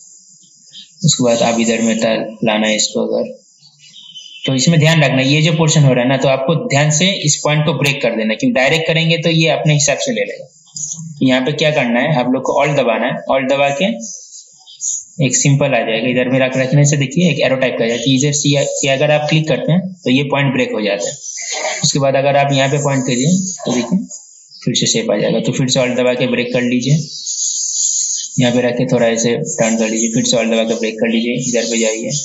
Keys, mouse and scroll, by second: 11.1 ctrl+z, 19.7-30.1 alt+drag, 30.7-32.2 alt+drag.